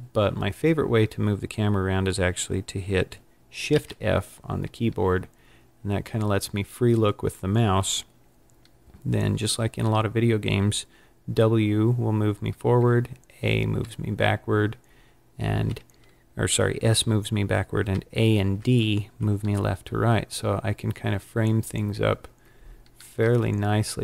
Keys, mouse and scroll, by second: 3.7 shift+f.